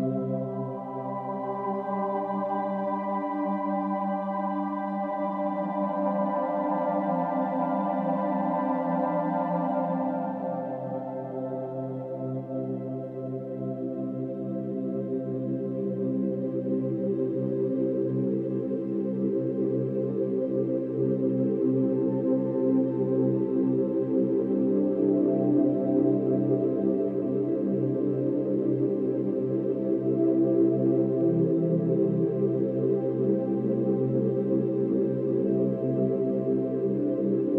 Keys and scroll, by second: 4.7 ctrl+-, 4.8 ctrl+=, 7.6 space, 9.1 space, 12.5 ctrl+-, 15.9 ctrl+-, 16.1 ctrl+=, 16.3 ctrl+-, 24.3 ctrl+-, 24.4 ctrl+=, 24.8 space, 35.3 space, 36.5 space.